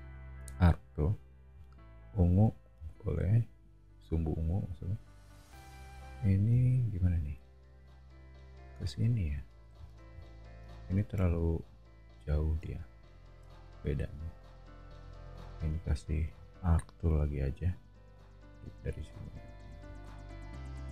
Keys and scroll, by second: 2.3 e, 7.2 a, 9.7 o, 13.5 a, 18.1 Escape.